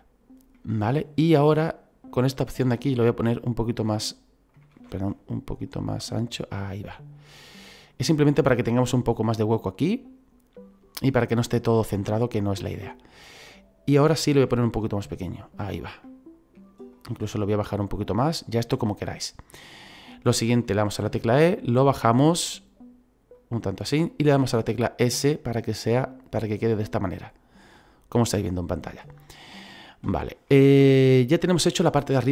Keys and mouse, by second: 0.5 middle click, 2.1 click, 3.3 click, 5.7 click, 9.8 middle click, 12.0 middle click, 14.4 s, 15.5 click, 16.0 middle click, 17.4 click, 18.9 middle click, 21.0 e, 23.4 click, 24.3 s, 25.7 click, 26.0 middle click, 30.8 middle click.